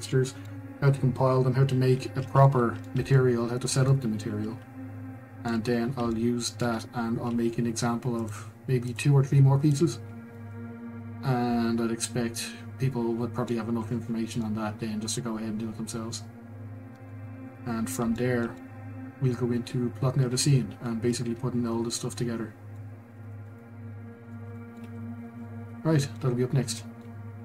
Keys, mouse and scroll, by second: 5.6 scroll, 6.1-8.3 shift+middle drag, 8.3 click, 8.9 click, 9.7 click, 10.0 scroll, 10.3-13.4 middle drag, 13.6 scroll, 14.5-17.1 middle drag, 17.1 scroll, 18.1-21.6 shift+middle drag, 22.9 scroll, 23.3-24.8 shift+middle drag, 24.8 scroll, 25.4 middle click, 26.3 scroll, 26.4 scroll up 1, 26.8 middle click.